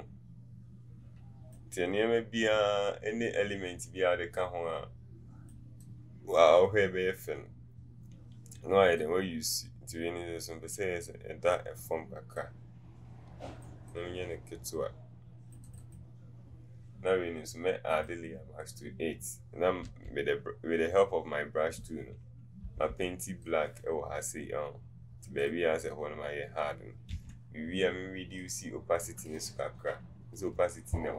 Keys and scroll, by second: 19.9 b, 22.8 [, 27.2 v.